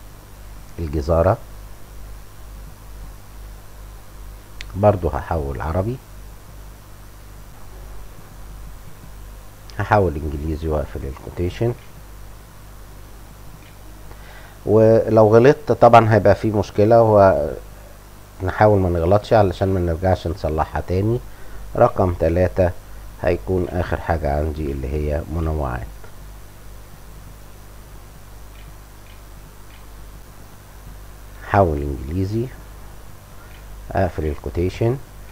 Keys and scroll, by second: 6.3-7.8 typing, 7.9 Scroll_Lock, 11.9 shift+l, 12.2 shift+;, 12.7 shift+', 13.5 shift+', 17.0-18.3 typing, 19.5 ,, 20.7-23.5 typing, 25.3 shift+', 25.5 Return, 25.6 Pause, 28.4-30.4 typing, 33.7 shift+Return, 34.1 shift+', 34.3 Return.